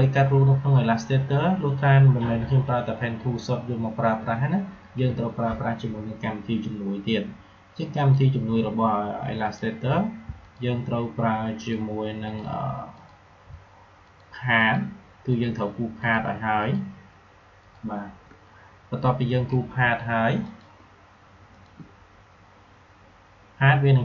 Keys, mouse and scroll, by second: 8.0 click, 10.4 shift+click.